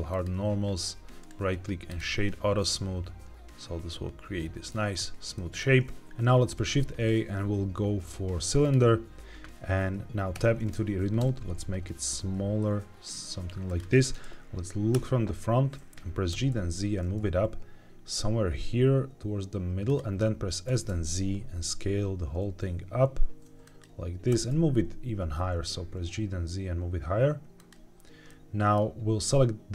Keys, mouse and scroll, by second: 0.0 click, 1.1 right click, 2.6-4.6 middle drag, 4.7-5.3 scroll down 2, 5.3 middle click, 6.0 middle click, 6.0 scroll up 1, 6.3 shift+a, 13.6 click, 14.8 KP_1, 16.2 g, 16.4 z, 19.8 click, 20.6 s, 20.8 z, 23.5 click, 24.2 g, 24.4 z, 27.5 click, 28.2 middle click.